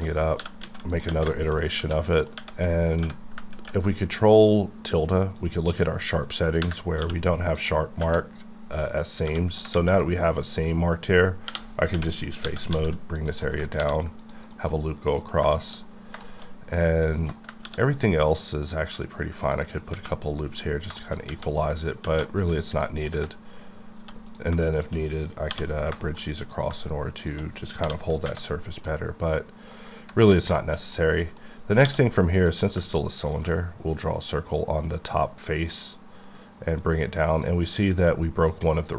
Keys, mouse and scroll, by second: 0.4 g, 0.6 z, 0.9 click, 1.4 shift+middle click, 1.5 shift+scroll up 3, 1.9 shift+middle click, 5.0 click, 6.2 click, 9.2 3, 9.7 alt+a, 11.5-12.7 typing, 13.6 ctrl+middle click, 13.8 ctrl+r, 14.2 click, 14.5 right click, 21.2-21.6 scroll up 2, 21.9 scroll down 1, 22.2 middle click, 22.8 middle click, 23.1-23.5 scroll up 3, 24.0 1, 24.3 click, 24.7 click, 25.5 j, 25.7 scroll down 1, 26.0 middle click.